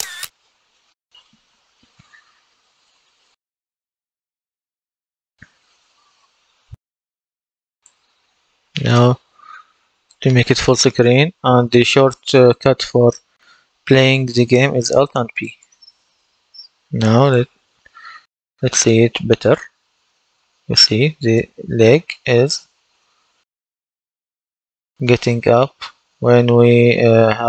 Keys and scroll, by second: 5.0 Escape, 6.8 F10, 9.9 F11, 15.3 alt+p, 17.9 w, 19.4 w, 20.4 w, 20.9 w.